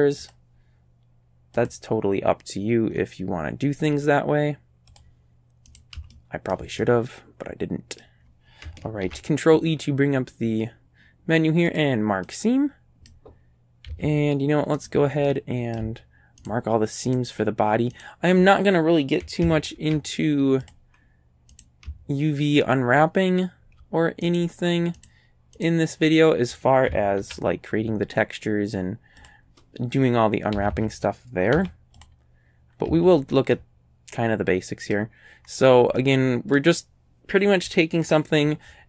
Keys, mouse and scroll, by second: 0.3 click, 1.6 click, 2.6-3.7 scroll up 3, 4.9 click, 5.7 shift+right click, 6.1 shift+middle click, 6.8-8.2 shift+drag, 9.1 ctrl+e, 11.7 click, 12.3-13.3 middle drag, 13.9 a, 14.8 right click, 15.3 middle click, 16.5 shift+right click, 17.1 shift+right click, 18.0 shift+right click, 19.8 ctrl+e, 20.7 click, 21.6 click, 21.9-23.8 shift+middle drag, 24.3 shift+right click, 25.0 shift+right click, 25.6 shift+right click, 27.2 ctrl+e, 29.2 click, 30.6 a, 30.8 a, 31.6 u, 32.0 click, 32.9 a, 33.5 middle click, 34.4 right click, 34.6 middle click, 35.4-35.7 scroll up 1, 36.0 right click, 36.6 click.